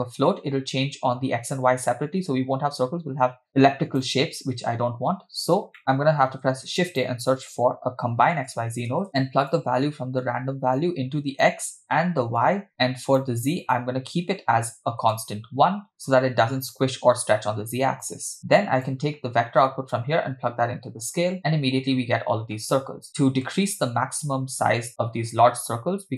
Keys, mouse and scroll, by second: 3.5 click, 5.4-5.8 scroll up 2, 5.8 middle click, 6.1 shift+a, 9.3-9.7 drag, 10.8-11.5 drag, 12.4-13.2 drag, 13.7-15.2 drag, 18.1 click, 20.0-21.4 drag, 23.1 middle click, 25.8-26.1 scroll up 2.